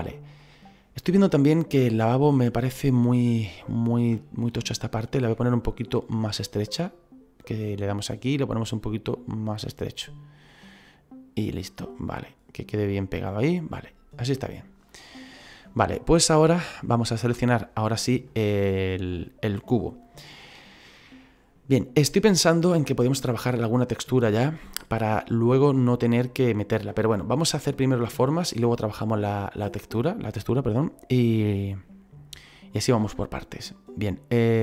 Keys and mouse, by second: 1.3 middle click, 2.2 right click, 2.7 middle click, 3.7 shift+middle click, 5.9 click, 8.9 click, 11.6 middle click, 15.5 middle click, 17.0 right click, 17.5 middle click, 21.7 middle click.